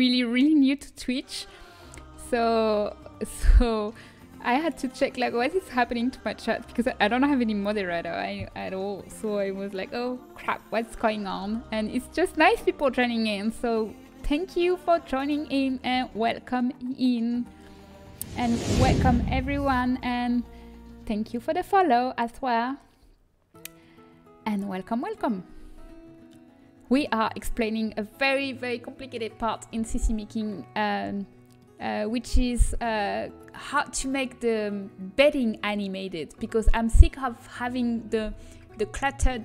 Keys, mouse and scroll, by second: 31.6-33.6 middle drag, 36.3-39.4 middle drag.